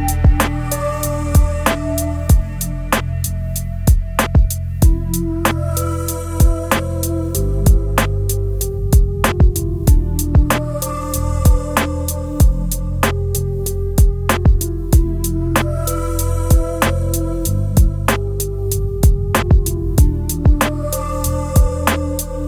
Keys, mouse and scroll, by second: 3.7 shift+click, 16.0 double click, 17.7 7.